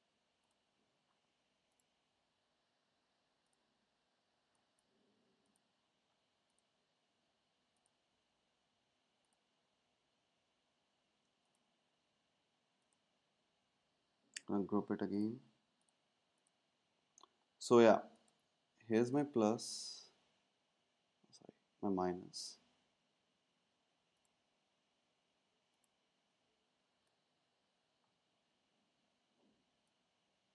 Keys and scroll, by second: 14.2 super+g, 26.9 super+g.